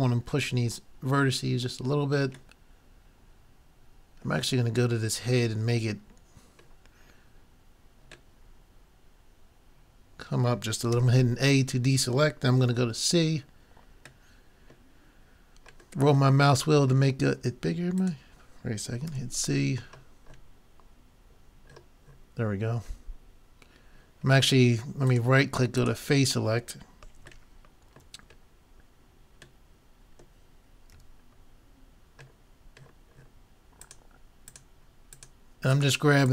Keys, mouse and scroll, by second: 0.2-10.2 middle drag, 11.0 a, 11.6-12.6 middle drag, 12.6 c, 19.1 c, 25.8-27.5 drag, 27.4 middle click, 30.9 c, 31.6-33.1 drag.